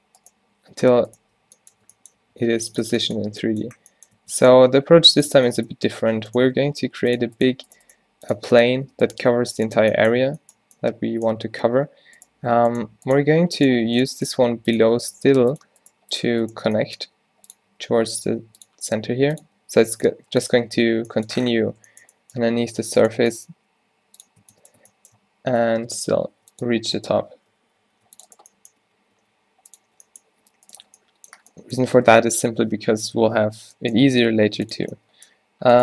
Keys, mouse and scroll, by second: 0.9 z, 2.2 z, 2.2 g, 2.9 Tab, 4.2 Tab, 4.8 g, 5.3 Tab, 6.1 Tab, 6.6 g, 7.5 g, 8.0 g, 8.5 Tab, 8.8 Tab, 11.6 z, 13.7 g, 14.3 g, 15.3 g, 16.0 g, 17.1 e, 17.8 s, 18.3 r, 19.0 g, 20.0 s, 20.3 z, 20.8 Tab, 21.7 Tab, 22.8 z, 23.2 z, 23.6 g, 24.5 Tab, 24.9 Tab, 26.3 ctrl+r, 27.6 ctrl+z, 27.9 ctrl+r, 28.9 t, 29.2 r, 29.9 z, 30.9 z, 33.4 z, 34.7 g, 34.8 z.